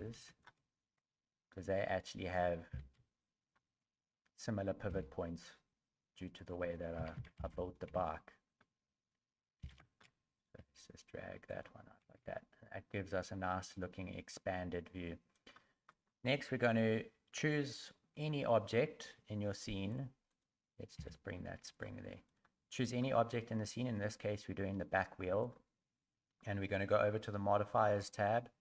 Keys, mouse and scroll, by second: 2.7 b, 4.9 g, 7.0 a, 7.2 a, 7.4 b, 7.9 g, 9.6 b, 10.6 g, 12.0 a, 12.2 a, 15.3 right click, 15.9 right click, 19.9 right click, 20.3 right click, 20.9 g, 22.3 right click, 22.8 right click, 25.4 click, 28.2 click.